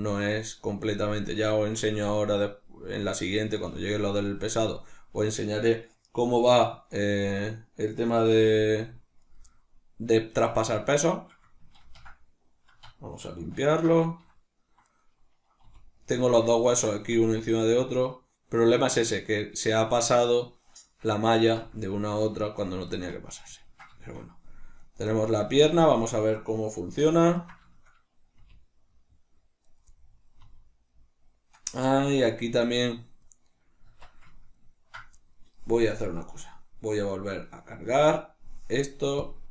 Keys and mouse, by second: 1.8-7.1 shift+middle drag, 7.1 right click, 8.2 r, 9.2 right click, 11.7 ctrl+z, 11.7-14.8 middle drag, 14.8 right click, 15.6 r, 16.4 right click, 16.6 right click, 17.0 r, 21.1 right click, 21.4 r, 22.6 right click, 22.9-24.8 shift+middle drag, 24.8 right click, 25.4-29.6 shift+middle drag, 26.7 alt+q, 28.3 r, 29.6 right click, 30.3-31.6 middle drag, 30.3 r, 31.6 right click, 31.8-32.8 shift+middle drag, 32.8 right click, 33.8 Tab, 33.8-39.5 middle drag.